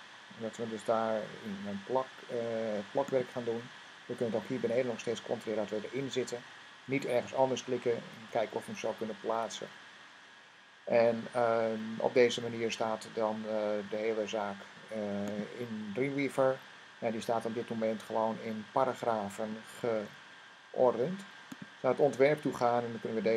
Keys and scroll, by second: 8.0 v.